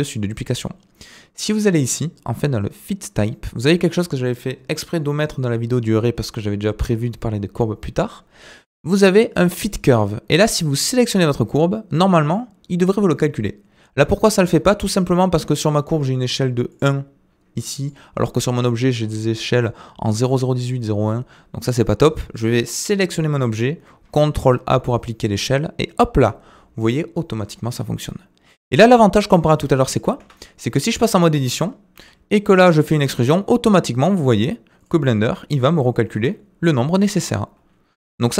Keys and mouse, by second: 8.4-9.6 drag, 10.9 click, 16.7 click, 17.8 click, 18.2-18.6 shift+middle drag, 24.0 ctrl+a, 28.5 middle drag, 29.8 shift+middle drag, 30.2 Tab, 30.8 click, 31.2 middle click, 31.9 e, 35.2 r, 36.1 e.